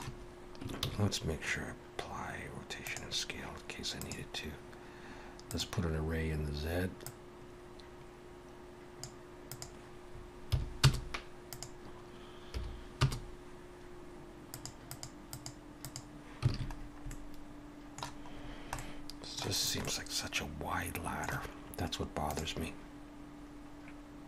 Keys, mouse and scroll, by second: 0.7 ctrl+a, 4.0 click, 7.1 click, 9.5 click, 14.9 click, 16.5 alt+a, 16.8-17.2 scroll down 3, 17.1 middle click, 18.4 scroll down 1, 18.8 middle click, 19.5-20.0 scroll up 3, 19.8 middle click.